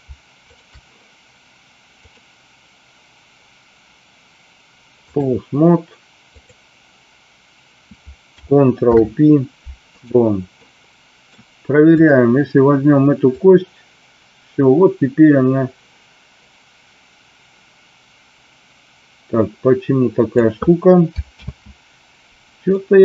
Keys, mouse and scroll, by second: 0.5 shift+click, 2.1-5.2 drag, 6.4 click, 8.7 ctrl+p, 10.6 middle click, 12.0 click, 13.2-20.4 drag, 21.5 ctrl+z, 22.7-23.0 middle drag.